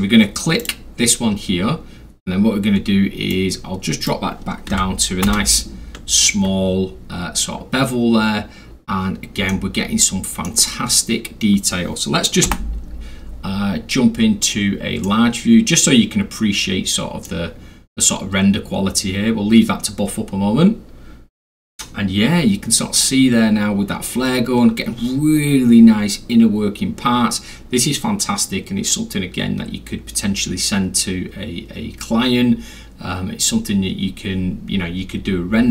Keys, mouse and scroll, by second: 0.6 click, 3.3 click, 4.7 1, 5.2 Return, 7.7 scroll up 2, 7.8-9.0 scroll, 9.5-10.5 alt+middle drag, 12.5 m, 13.5-14.1 scroll down 3, 14.1 scroll, 15.0-17.2 middle drag, 15.0 scroll down 2, 15.2-15.8 scroll, 15.8 scroll.